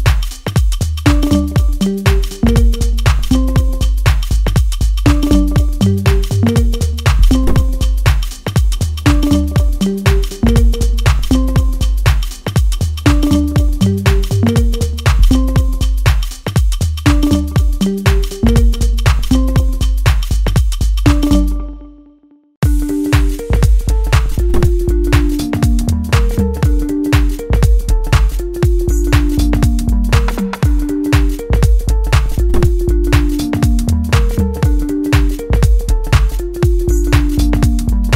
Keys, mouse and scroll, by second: 6.7-11.1 drag, 11.1-16.0 middle drag, 16.0-22.4 drag, 22.4-24.1 middle drag, 24.1-24.5 scroll up 1, 24.5-26.2 middle drag, 26.2 scroll down 1, 26.5-28.3 middle drag, 28.3 click, 32.3-33.8 middle drag, 33.8-36.4 drag, 36.4 middle click, 37.5-38.1 drag.